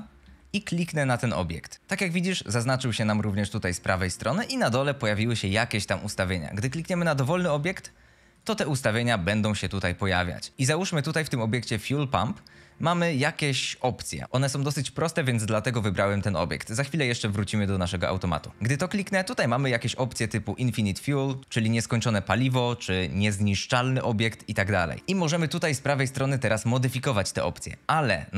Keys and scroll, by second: 6.3-8.1 typing.